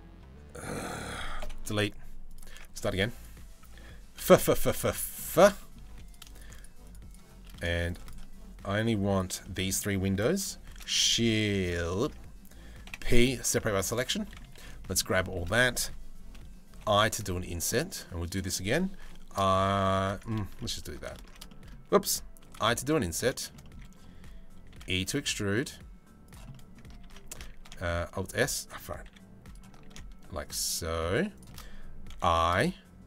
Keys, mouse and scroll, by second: 1.1 Delete, 1.9 click, 2.1 Tab, 2.5 2, 2.7 click, 3.8-5.5 typing, 4.4 middle click, 5.2 middle click, 5.7 middle click, 6.0 shift+middle click, 7.1 middle click, 9.0 middle click, 10.3 shift+d, 11.6 ctrl+z, 12.5 p, 13.3 Tab, 13.4 click, 13.6 Tab, 13.8 middle click, 14.2 a, 14.4 middle click, 15.2 middle click, 16.4 i, 18.6 i, 20.2 middle click, 20.8 ctrl+z, 21.1 shift+middle click, 22.1 i, 23.0 shift+middle click, 23.2 middle click, 24.3 e, 26.1 middle click, 26.6 ctrl+z, 27.2 alt+s, 28.7 e, 29.5 alt+s, 31.7 i.